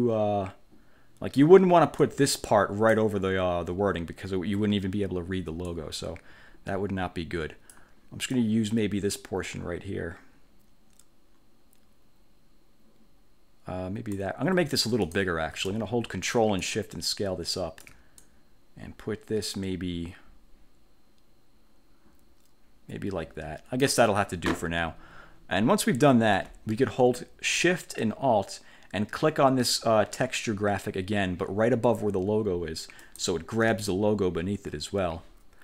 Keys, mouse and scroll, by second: 2.1 click, 5.8-8.1 drag, 8.5-14.5 drag, 15.1 click, 16.7-18.1 ctrl+shift+drag, 18.3-24.1 ctrl+shift+drag, 33.1 alt+shift+click.